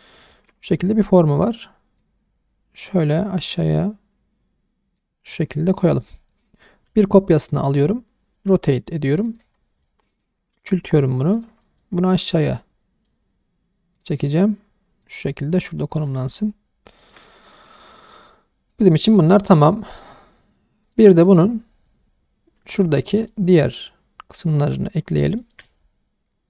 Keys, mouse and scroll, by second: 0.0 scroll up 1, 0.3 shift+middle drag, 0.6 middle click, 0.9-2.0 scroll up 1, 2.0 click, 5.3-5.9 alt+middle drag, 6.1 scroll down 1, 6.9 shift+d, 7.2-8.3 right drag, 8.3 r, 9.2 click, 9.6 scroll up 1, 9.8-10.2 middle drag, 10.2-10.5 drag, 10.5 s, 11.3 click, 11.6 middle drag, 11.9-12.4 scroll up 1, 12.4-13.1 middle drag, 13.2-14.0 scroll up 2, 14.0 click, 15.3 scroll down 1, 15.3-16.1 middle drag, 16.2 scroll down 2, 17.0-17.7 scroll down 2, 17.0 shift+middle click, 17.7 click, 19.1 click, 19.9 click, 20.8 click, 21.2 click, 21.5-21.8 scroll down 1, 21.8-23.2 middle drag, 23.3-24.8 middle drag, 25.0 scroll up 2, 25.4 shift+middle drag, 25.6-26.4 middle drag.